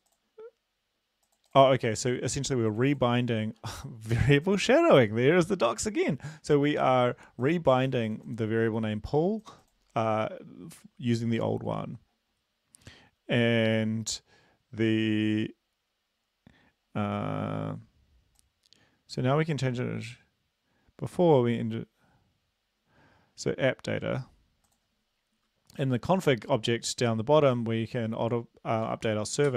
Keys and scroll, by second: 25.8 Down, 28.9 Return, 29.1 Tab, 29.4 ..